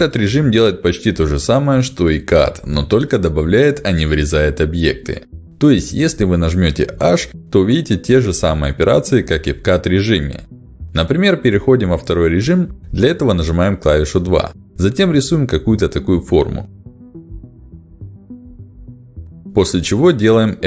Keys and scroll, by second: 5.6 h, 11.5 ctrl+alt+x, 19.0 f, 19.5 d.